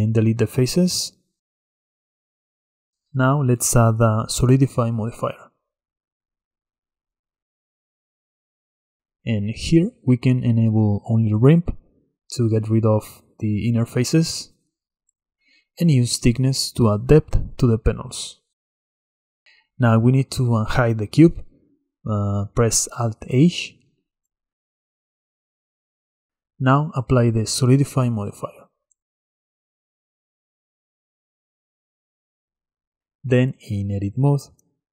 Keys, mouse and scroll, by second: 0.7 x, 1.8-2.6 middle drag, 2.6 Tab, 4.7 click, 6.7-11.9 drag, 12.6 click, 15.8-18.8 shift+drag, 22.6 alt+h, 23.7 drag, 24.1 click, 24.4-26.1 middle drag, 26.1 click, 28.5-31.5 drag, 32.2 Tab.